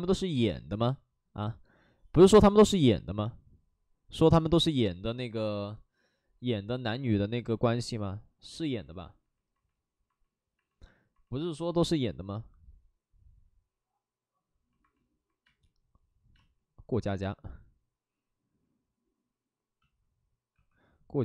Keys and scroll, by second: 15.4 space, 16.3 space, 20.5 w.